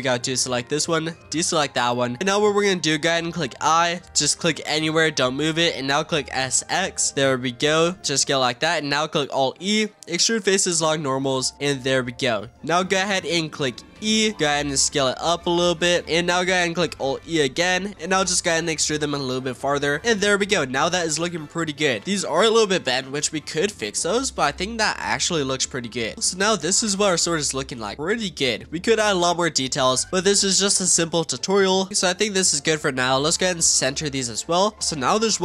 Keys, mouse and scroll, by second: 0.1 shift+click, 0.7 shift+click, 1.4-3.6 middle drag, 3.6 i, 6.2 s, 8.1-9.4 middle drag, 9.4 alt+e, 11.6-13.9 middle drag, 13.9 e, 14.6 s, 17.0 alt+e, 19.3 click, 20.4-21.4 middle drag, 21.4 z, 22.7-24.5 middle drag, 24.5 z, 26.1 scroll up 2, 26.4-26.9 shift+middle drag, 26.9-27.2 scroll down 2, 27.2 Tab, 27.7 click, 27.9-29.3 middle drag, 29.3 scroll up 1, 29.4-30.0 middle drag, 30.0 click, 30.1 scroll up 2, 30.2 Tab, 30.6-31.9 shift+middle drag, 31.9 l, 32.2 l, 33.1 click, 34.2 Tab, 34.5 click, 34.8-35.4 middle drag.